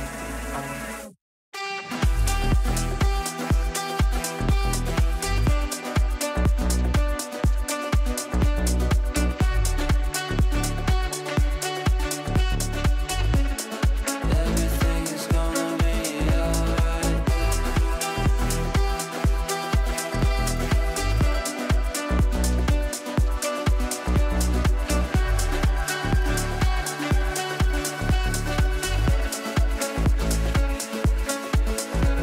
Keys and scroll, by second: 3.6 ctrl+q, 10.8 Up, 14.3 shift+F2, 14.6 Escape.